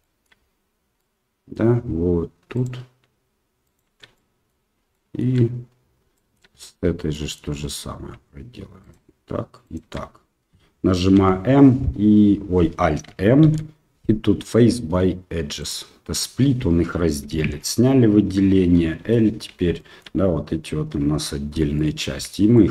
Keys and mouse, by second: 0.0 shift+middle click, 0.9 middle click, 2.6-3.8 alt+shift+right drag, 4.1 middle click, 4.9 shift+middle click, 6.1 shift+middle click, 7.1 middle click, 8.8-9.9 alt+shift+right drag, 11.1 m, 13.4 alt+m, 17.4 alt+a, 19.1 l, 19.9 shift+middle click, 21.6 l, 21.8 middle click, 22.6 shift+middle click.